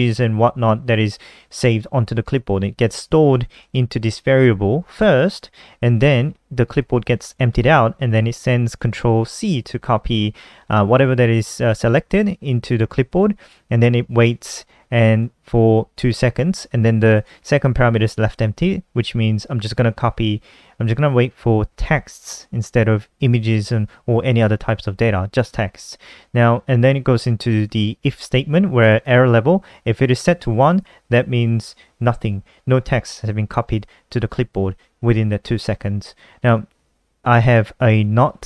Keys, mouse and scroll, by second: 3.1 click, 3.3 click, 6.4 click, 7.8 click, 14.8 click, 16.7 click, 28.4 click, 31.9 click, 37.0 click.